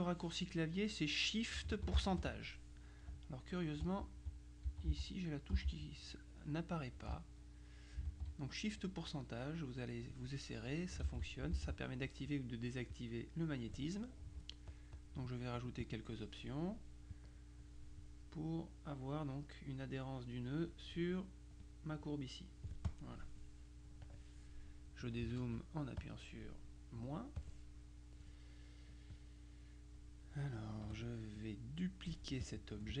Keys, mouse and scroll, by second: 4.4 click, 5.5 click, 7.7 click, 13.0 click, 14.8-15.6 drag, 15.6 click, 17.2 click, 18.1-19.6 drag, 21.7 click, 22.9 click, 24.1 click, 25.3 KP_Subtract, 26.1 click, 27.5-28.8 drag, 30.9 F2, 31.4-33.0 drag.